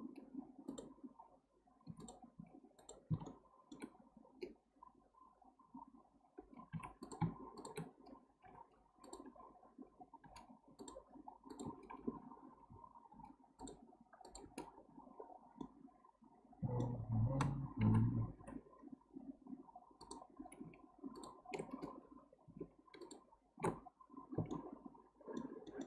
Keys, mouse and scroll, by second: 1.9 2, 2.0 drag, 2.3 x, 3.3-6.3 shift+middle drag, 7.0 click, 7.6 shift+drag, 8.4 m, 10.2 k, 13.1 k, 15.2-15.6 scroll down 1, 15.6-17.0 middle drag, 17.0-17.8 scroll up 1, 17.8 KP_7, 18.4 3, 20.0 click, 21.1 ctrl+click, 23.0 alt+shift+click, 23.7-24.3 scroll down 1, 24.5-25.8 shift+middle drag.